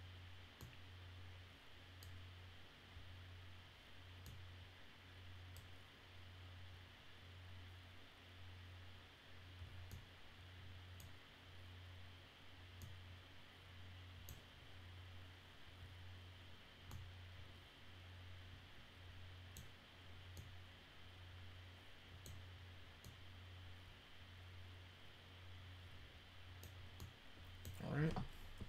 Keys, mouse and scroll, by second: 0.5-1.9 middle drag, 2.9 scroll down 2, 4.2-5.5 middle drag, 9.8-10.9 middle drag, 12.7-14.2 middle drag, 16.8-19.5 middle drag, 20.3-22.7 middle drag, 23.0-26.5 middle drag, 26.9 middle click.